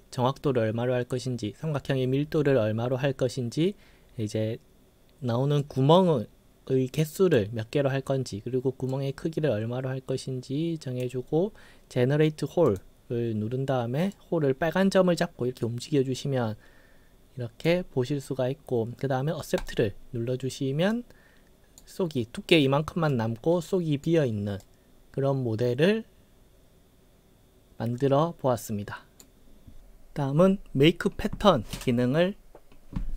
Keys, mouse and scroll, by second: 5.6-7.3 drag, 8.9-11.0 drag, 12.7 click, 14.1-17.7 drag, 19.6 click, 21.0-21.8 right drag, 23.1-24.1 right drag, 24.6-29.2 right drag.